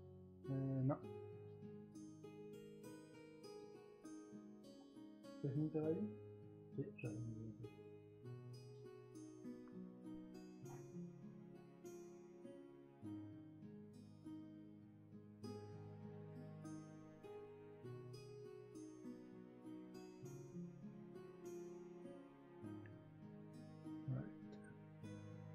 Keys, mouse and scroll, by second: 22.3 ctrl+z.